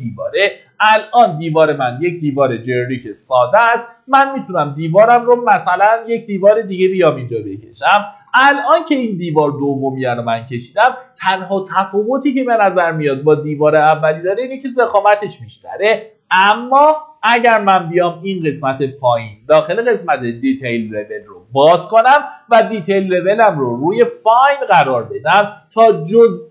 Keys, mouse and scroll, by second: 0.4 click, 2.7-4.2 scroll up 1, 4.2 click, 7.2-8.2 scroll up 1, 8.2 Escape, 20.5 click.